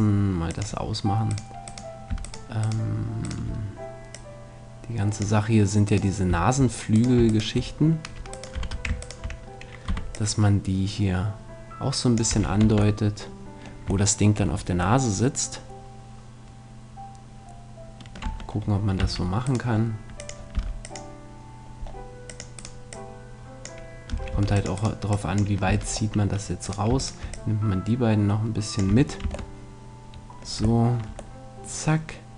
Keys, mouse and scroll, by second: 0.5-2.0 drag, 0.5 middle click, 1.3 right click, 2.3-4.1 right drag, 5.0 click, 5.8-10.3 right drag, 8.6 z, 9.9 z, 10.1 click, 10.9-12.0 drag, 12.3 a, 12.4-14.2 middle drag, 12.6 Tab, 16.6 middle click, 18.0-19.4 middle drag, 18.2 Tab, 19.0 c, 19.6-21.3 middle drag, 20.2-22.0 drag, 20.2-21.2 right drag, 20.6 c, 22.6-23.8 right drag, 22.9 click, 22.9 middle click, 24.1 a, 24.3 click, 24.3 c, 24.8 right click, 25.6 a, 28.9 a, 29.2 Tab, 29.6-32.2 middle drag.